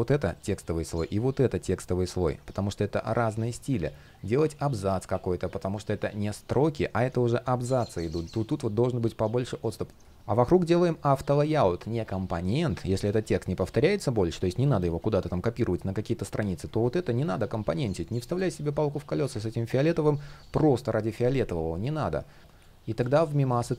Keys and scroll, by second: 9.4 shift+super+z.